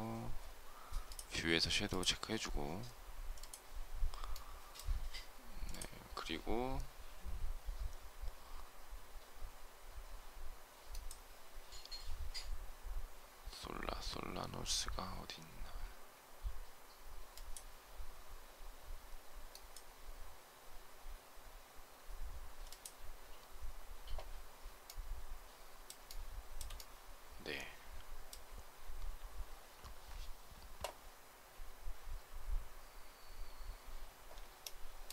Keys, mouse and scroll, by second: 25.9 shift+middle click, 34.5 shift+middle click.